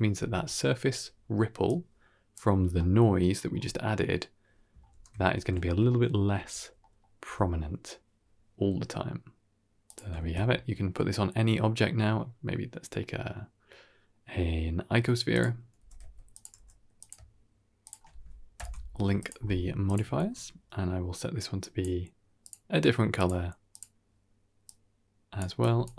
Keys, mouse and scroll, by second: 1.5 click, 2.4-3.1 scroll down 2, 2.7 middle click, 3.3-4.6 scroll up 4, 4.8 ctrl+space, 5.2 scroll down 1, 5.4-6.2 shift+middle drag, 6.2 z, 6.7 middle click, 7.1 g, 10.0 shift+middle click, 10.2 shift+a, 15.7 g, 16.4 g, 17.7 shift+click, 18.4 ctrl+l, 19.7 click, 20.1 ctrl+space, 21.5 drag, 22.3 click, 23.0 click, 23.6 click.